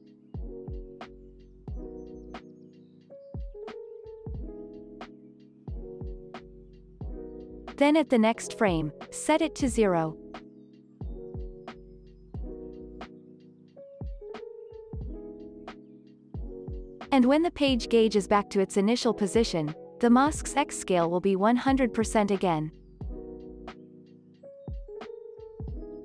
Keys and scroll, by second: 3.2 ctrl+s, 4.7 x, 7.9 z, 9.8 alt+x, 14.1 0, 15.0 Return, 16.3 x, 18.0 alt+x, 23.1 alt+z.